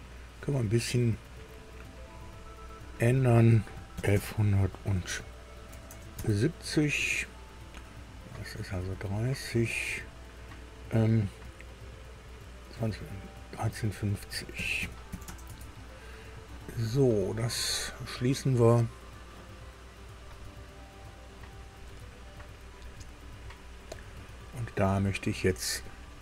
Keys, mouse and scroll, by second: 0.7 click, 2.1 click, 3.9 KP_1, 4.1 KP_1, 5.7 KP_7, 5.9 KP_0, 6.2 KP_Enter, 9.8 click, 14.6 KP_1, 14.8 KP_3, 15.1 KP_5, 15.3 KP_0, 15.5 KP_Enter, 17.9 click, 24.1-25.7 middle drag.